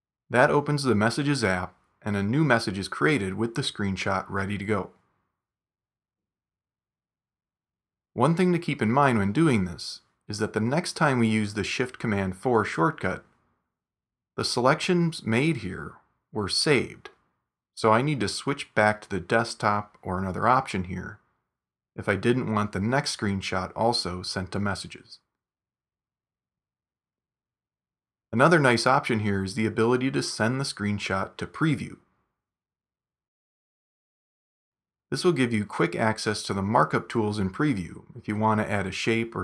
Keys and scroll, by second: 6.6 super+q, 9.6 shift+super+4.